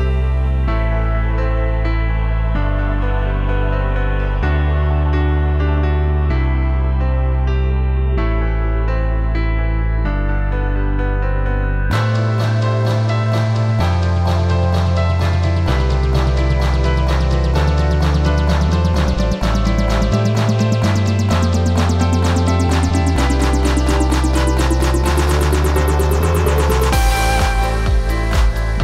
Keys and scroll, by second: 8.8 t, 13.0 v, 14.6 ctrl+t, 19.7 ctrl+t.